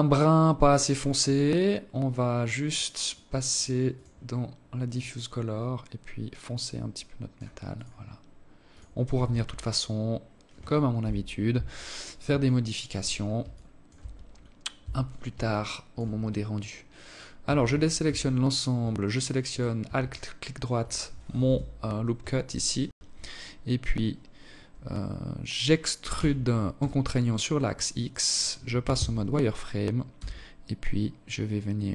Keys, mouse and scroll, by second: 1.4 click, 1.8 click, 2.3 click, 2.6 click, 7.4 click, 8.0 ctrl+s, 8.7-9.1 scroll down 3, 9.7 KP_7, 11.1 alt+shift+click, 12.2 alt+shift+click, 12.8-13.2 scroll up 1, 13.2-13.5 scroll down 1, 13.5 Tab, 14.2 alt+shift+click, 16.2 a, 16.4 a, 16.7 a, 18.2 alt+right click, 18.8 alt+click, 20.1 KP_7, 21.6 scroll up 1, 21.8 scroll down 1, 24.7 e, 27.4 z, 28.8 s.